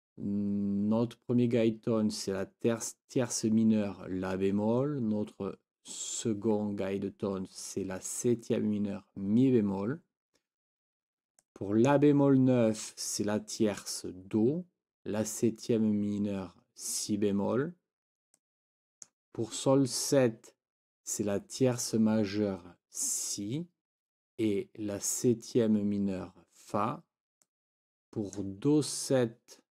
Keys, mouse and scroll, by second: 11.4 click, 18.3 click, 18.7-19.1 scroll up 1, 19.1 click, 27.5 click, 27.6-28.5 scroll up 2, 27.7 click.